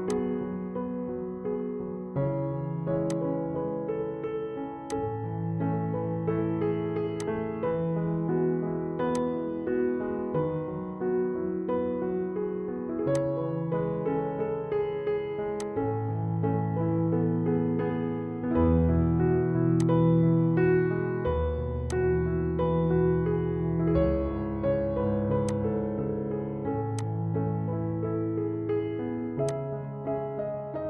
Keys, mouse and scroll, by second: 0.1 shift+click, 3.5 click, 7.3 click, 10.4 ctrl+shift+a, 13.3 click, 15.7 click, 19.9-24.3 drag, 25.5 click, 29.9 click.